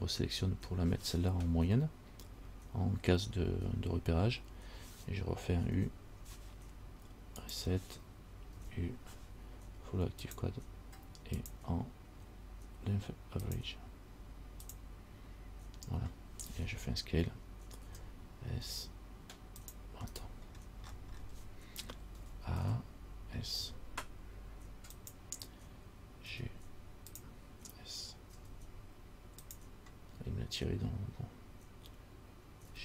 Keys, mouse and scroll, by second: 5.9 u, 8.7 u, 18.0 s, 20.3 right click, 20.6-21.5 scroll down 12, 22.4 a, 22.8 a, 23.7 s, 26.5 g, 28.5 s, 30.3 scroll up 2.